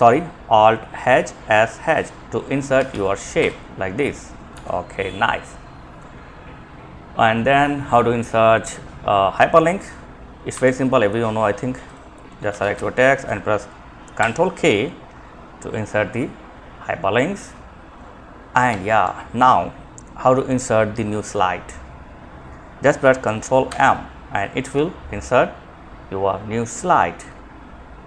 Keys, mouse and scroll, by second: 1.9 Down, 2.1 Down, 2.6 Return, 3.6 ctrl+z, 9.7 Home, 11.1 click, 11.7 ctrl+Left, 11.9 ctrl+shift+Right, 17.9 Escape, 20.4-21.4 drag, 22.8 ctrl+m, 26.5 ctrl+m.